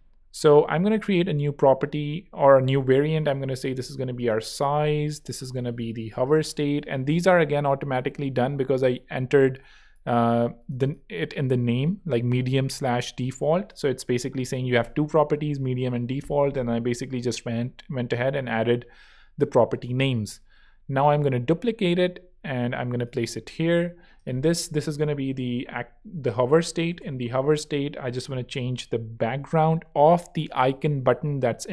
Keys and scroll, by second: 3.4-6.6 typing, 26.4-27.5 typing.